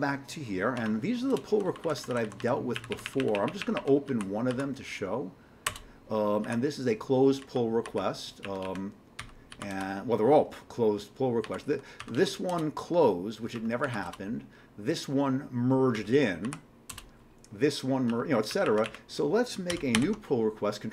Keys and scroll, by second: 0.8 Tab, 1.5 Down, 1.7 Down, 1.8 Down, 2.0 Down, 2.8 Up, 2.9 Up, 3.0 Up, 3.2 Up, 4.1 Down, 4.5 Down, 5.7 Return, 6.4 Down, 7.4 Down, 8.4 Up, 8.6 Up, 9.2 q, 9.5 Down, 9.7 Return, 11.4 Down, 12.0 q, 12.4 Up, 12.5 Return, 13.5 q, 13.8 Down, 14.0 Return, 15.9-16.9 typing, 18.2-20.7 typing.